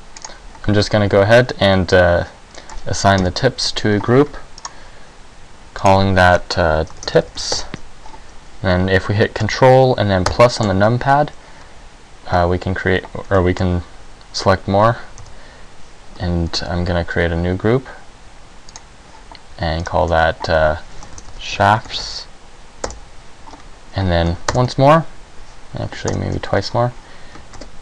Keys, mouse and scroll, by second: 1.0 middle click, 3.3 KP_1, 4.7 click, 5.9 click, 10.4 ctrl+KP_Add, 13.6 middle click, 15.4 KP_1, 16.6 ctrl+g, 20.0 click, 24.6 ctrl+KP_Add, 26.2 ctrl+KP_Add, 27.7 ctrl+g.